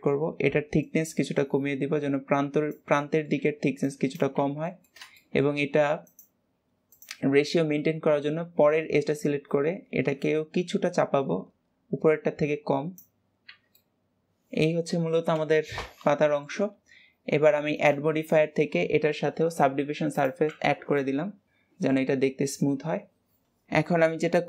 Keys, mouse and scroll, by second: 0.7 click, 2.9-5.9 middle drag, 5.9 click, 6.7 click, 7.3-8.5 scroll up 1, 8.5 click, 13.1 scroll down 2, 13.3 Tab, 13.7-16.6 middle drag, 17.6-20.7 drag, 20.8-23.4 middle drag.